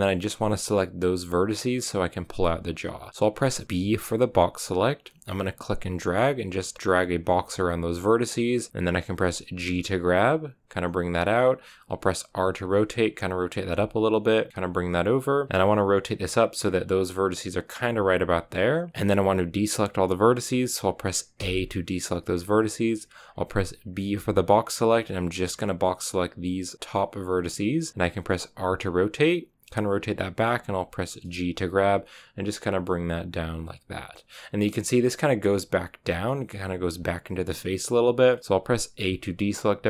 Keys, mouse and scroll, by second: 9.4 g, 12.2 r, 13.5 g, 14.5 r, 15.4 g, 17.7 r, 18.1 g, 21.3 a, 26.7 b, 28.5 r, 30.4 g, 38.9 a.